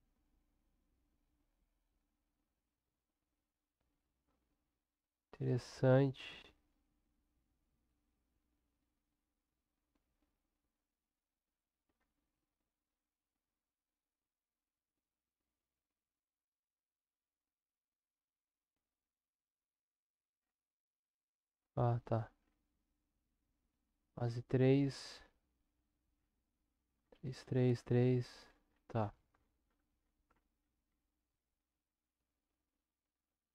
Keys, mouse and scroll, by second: 2.0-33.5 drag.